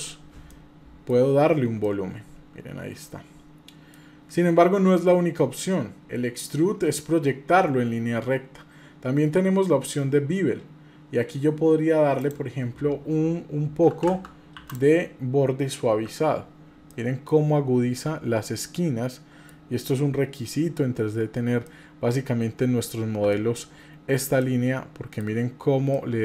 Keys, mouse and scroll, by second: 0.5-1.1 middle drag, 1.2-1.7 scroll up 2, 1.8-4.0 middle drag, 1.8 scroll up 1, 4.7-6.0 middle drag, 6.0 scroll down 2, 12.3-16.0 drag, 14.0 KP_0, 16.9 middle click, 18.0-19.5 middle drag, 21.6-22.9 middle drag, 22.9-23.3 scroll down 2, 23.3 middle click, 24.4-25.2 middle drag, 25.9-26.2 middle drag.